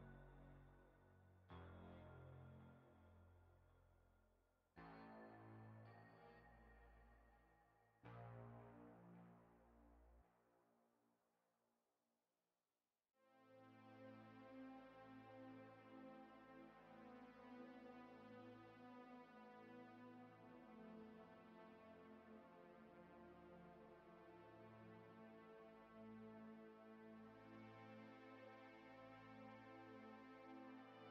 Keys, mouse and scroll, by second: 0.8 click, 2.7 click, 4.0 click, 6.0 click, 6.8 middle click, 8.6 shift+middle click, 12.2 g, 16.7 shift+middle click, 18.2 middle click, 19.3 shift+middle click, 25.2 click, 26.4 middle click, 30.5-30.8 scroll down 3, 30.6 shift+middle click, 30.8 middle click.